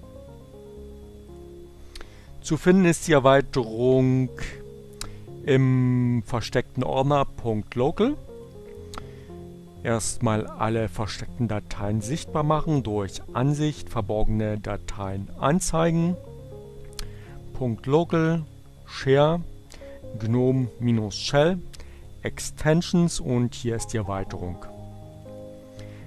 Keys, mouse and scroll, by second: 0.6 click, 8.8 click, 14.1 click, 16.3 click, 17.5 click, 19.6 click, 21.3 click, 23.2 click, 24.0 click.